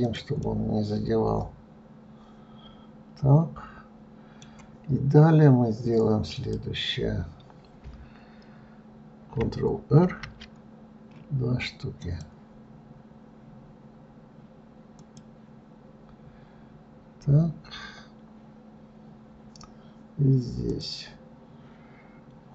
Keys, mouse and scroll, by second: 0.7-3.8 middle drag, 6.6 click, 10.3 ctrl+r, 21.0 click.